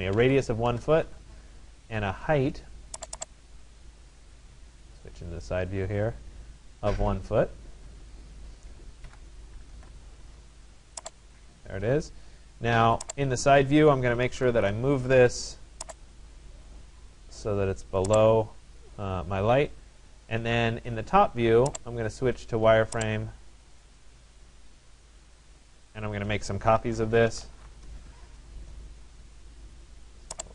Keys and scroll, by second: 0.7 Return, 8.8 1, 9.8 Return, 14.1 Return, 27.5 Return.